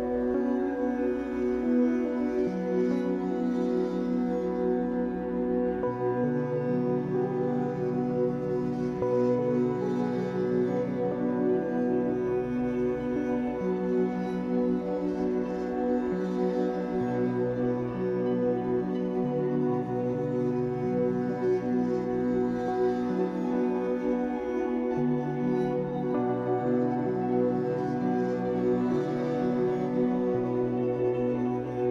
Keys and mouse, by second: 0.5 click, 1.5 typing, 2.3 shift+click, 2.9 click, 3.2 typing, 5.4 typing, 6.3 click, 6.8 typing, 8.6 typing, 9.6 alt+shift+drag, 10.6 click, 12.0-17.1 drag, 16.9-18.3 typing, 20.4-23.3 shift+drag, 23.1-24.3 typing, 23.4 click, 25.4-26.3 typing, 25.9 click, 27.3 typing, 27.7 click, 29.5-31.0 typing.